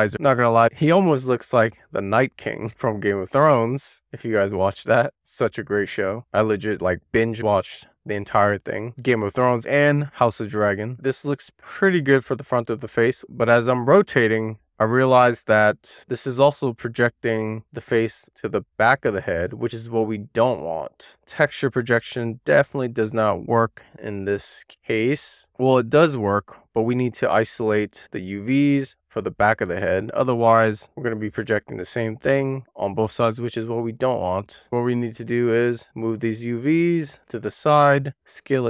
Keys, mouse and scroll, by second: 0.1-1.7 middle drag, 3.6 scroll down 1, 3.8 e, 4.3 r, 4.8 click, 5.4 w, 6.0 click, 7.8-9.4 middle drag, 9.6-10.6 scroll down 1, 10.6 w, 10.9 middle click, 11.1 middle click, 11.5 scroll down 3, 18.6-24.6 middle drag, 25.8-27.6 shift+middle drag, 35.1 click, 37.8 e.